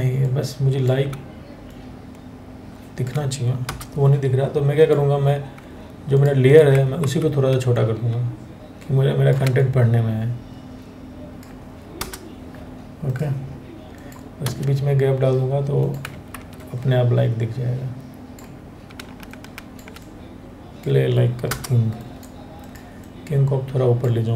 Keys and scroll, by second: 3.3 Return, 6.6 ctrl+t, 11.6 Return, 12.7 Return, 15.9 ctrl+t, 21.1 Return, 22.0 Return.